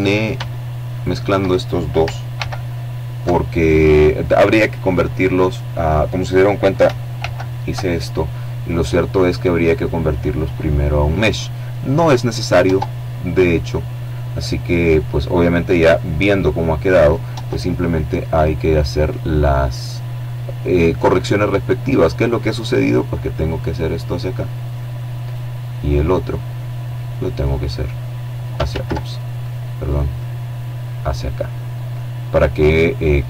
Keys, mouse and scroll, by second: 0.8 alt+m, 5.6 alt+m, 11.1 Tab, 11.9-12.6 scroll down 2, 15.8 Tab, 20.2 right click, 21.0-23.7 drag, 23.6 right click, 25.8-27.3 drag, 27.1 ctrl+z, 27.8 right click, 28.5-32.0 drag, 32.4 right click.